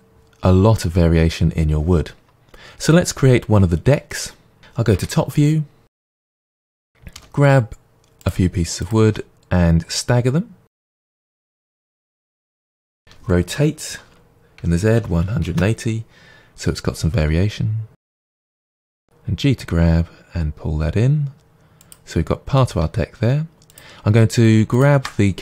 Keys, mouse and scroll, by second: 4.9 KP_7, 5.8 scroll down 2, 6.1 click, 7.1 g, 8.2 click, 8.8 click, 9.1 g, 10.8 click, 10.9 g, 11.6 click, 12.6 shift+d, 13.0 r, 15.6 Return, 17.2 g, 18.4 click, 18.8 g, 21.9 click, 23.7 click, 24.7-25.4 shift+drag.